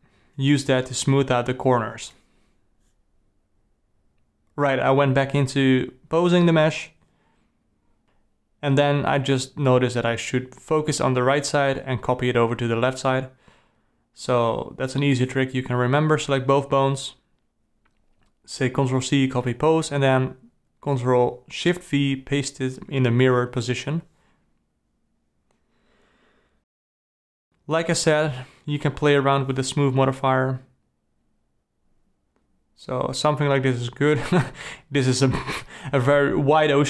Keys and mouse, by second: 0.2 g, 1.7 click, 2.2 g, 4.8 click, 5.3 g, 7.1 r, 8.9 click, 9.2 r, 11.7 click, 12.1 r, 13.8 click, 14.4 r, 16.4 click, 18.5 ctrl+c, 19.9 ctrl+shift+v, 27.3-29.5 drag, 30.4-34.5 drag, 34.5 KP_Divide, 34.5 d, 34.9-36.0 alt+middle drag, 36.3 ctrl+middle click.